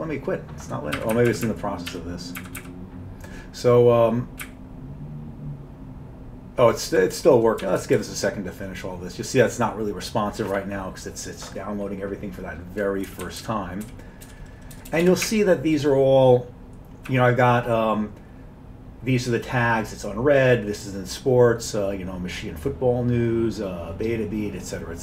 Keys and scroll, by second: 1.0 Up, 1.2 Up, 1.3 Up, 1.5 Up, 1.9 q, 2.4 Up, 2.6 Up, 4.5-7.0 Up, 7.0 typing, 7.7 Page_Up, 7.8 Page_Up, 8.0 Page_Up, 13.1 Down, 13.3 Down, 13.4 Down, 13.9 Page_Down, 14.3 Page_Up, 14.8 Page_Up, 14.9 Page_Up, 15.1 Page_Up, 15.3 Up, 15.8 Up, 15.9-17.1 Up.